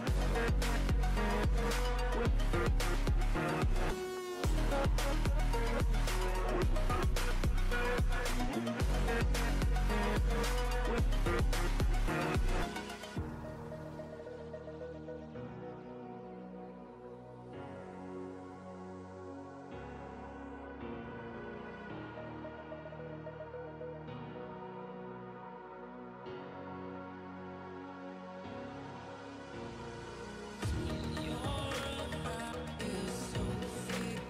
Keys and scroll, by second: 0.1 ctrl+z, 0.6 [, 0.9 [, 1.3 ctrl+z, 1.6 [, 1.9 [, 14.1 ], 14.1 ], 14.2 ], 14.7 ], 16.0 ctrl+z, 17.3 [, 17.9 ctrl+z, 20.9 ], 20.9 ], 22.5 ctrl+z, 26.6 [, 26.6 [, 26.7 [, 26.9 [, 27.4 ctrl+z, 30.8 ctrl+z, 32.8 ctrl+z, 33.0 [, 33.1 [, 33.1 [.